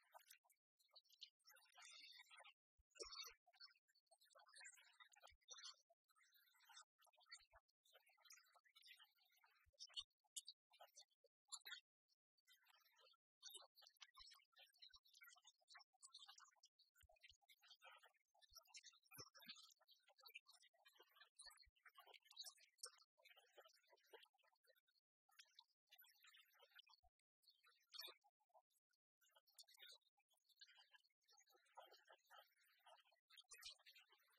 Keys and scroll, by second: 15.3 ctrl+j, 18.8 ctrl+t.